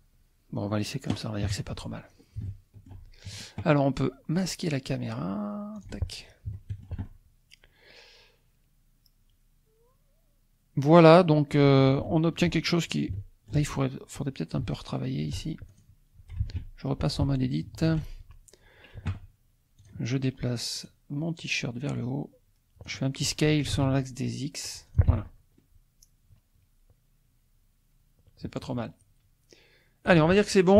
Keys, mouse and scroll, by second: 1.5 KP_1, 2.1-2.7 scroll down 2, 2.4 shift+click, 2.8 shift+scroll up 1, 5.7 click, 6.5 shift+click, 6.6-12.0 shift+middle drag, 12.7-13.1 shift+scroll up 4, 13.1-15.5 shift+drag, 15.7 shift+click, 16.5 ctrl+Tab, 17.3 ctrl+Tab, 19.9 click, 20.9 click, 21.8-23.0 drag, 23.7 s, 23.8 x, 24.8 click, 25.7-29.0 drag.